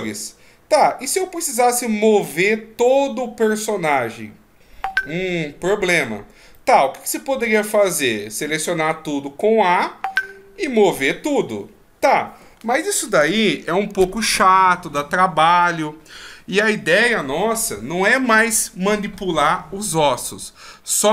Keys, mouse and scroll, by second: 6.6 middle click, 8.4 a, 8.7 a, 10.1 click.